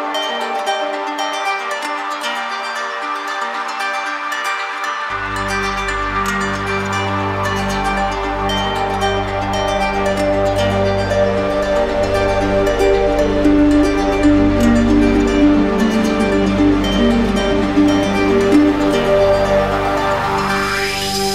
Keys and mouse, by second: 0.9 click, 4.5 click, 7.0 click, 7.9 click, 8.7 click, 14.7 click, 15.6 alt+click, 20.1 w.